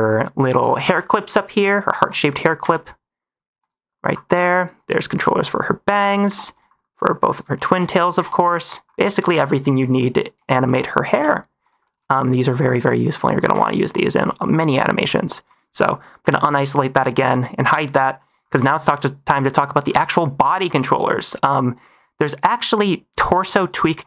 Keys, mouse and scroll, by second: 0.4 click, 1.4-2.5 typing, 2.2 middle click, 3.9 -, 4.2 middle click, 4.5 click, 4.8 click, 5.8-8.8 typing, 7.2 click, 9.3 click, 9.7 middle click, 10.3 l, 10.6 middle click, 10.8 -, 11.0 r, 11.7 middle click, 12.0 -, 12.6 click, 12.8 click, 13.2 -, 13.4 r, 14.3 -, 14.8 shift+middle click, 16.1 click, 16.9 shift+middle drag, 18.6 shift+middle click, 19.3 middle click, 20.4 click, 23.1 click, 23.6 click.